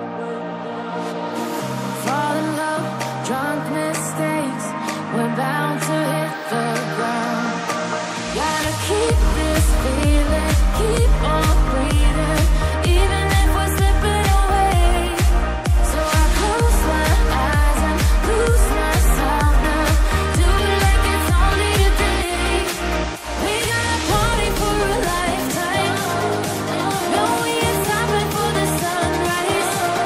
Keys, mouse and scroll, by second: 3.9 click, 4.7 double click, 5.8 click, 11.2 click, 11.4 double click, 11.8 click, 12.0 double click, 12.6 click, 14.0 double click, 17.4 double click, 19.3 click.